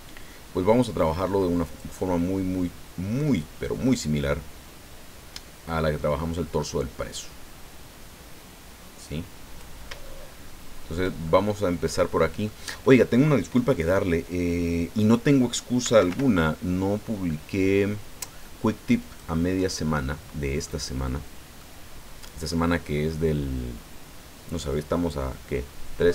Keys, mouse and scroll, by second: 1.6 click, 4.0-9.8 drag, 10.0-11.1 shift+middle drag, 11.2-12.6 shift+middle drag, 15.8 s, 16.1 y, 19.0 click, 19.5-20.8 drag, 21.0 scroll down 1, 21.6-22.6 drag.